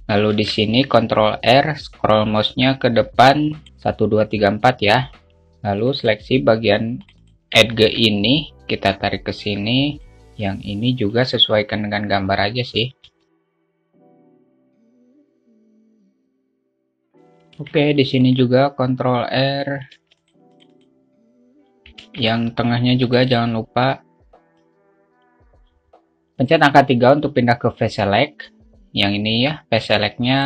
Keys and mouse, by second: 0.9 ctrl+r, 6.5 click, 7.5 shift+click, 7.7 shift+click, 8.1 alt+shift+middle click, 9.3-10.3 drag, 11.5-13.4 drag, 13.4 alt+shift+middle click, 15.2 click, 16.9 click, 18.0 ctrl+r, 20.5 ctrl+r, 22.4 ctrl+r, 25.5 click, 27.0 3.